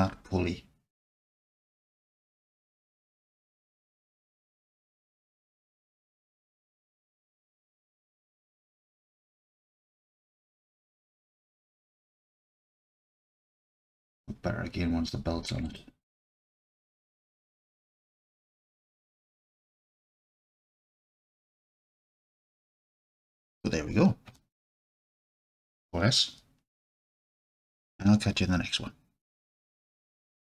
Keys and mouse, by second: 1.2 click, 2.0-5.5 drag, 5.5-6.0 right drag, 9.6-11.6 alt+middle drag, 12.3-13.2 drag, 13.4-14.2 alt+drag, 15.7 click, 16.7-18.9 alt+drag, 19.2-20.0 drag, 21.0 alt+click, 26.8 ctrl+s.